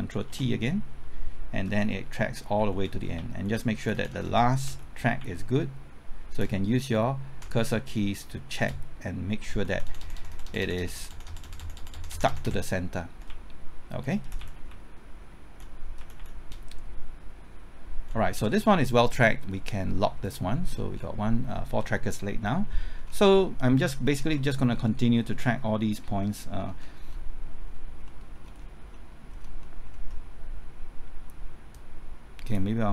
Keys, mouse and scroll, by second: 0.3 ctrl+t, 1.7-3.7 typing, 3.9 Right, 4.6 Left, 6.4 Right, 7.9 typing, 9.2 Right, 13.1 Left, 14.2 Left, 15.2 Left, 16.0 Left, 16.5 Right, 17.0 Right, 20.2 click, 20.7 scroll down 1, 23.0-23.3 scroll up 1, 23.3 middle click, 23.9 scroll up 1, 24.3 middle click, 26.8 scroll down 1, 27.1 middle click, 27.7 scroll up 1, 28.1 middle click, 28.3 scroll up 1, 28.9 middle click, 29.3 scroll up 1, 29.6 middle click, 31.7-32.9 drag.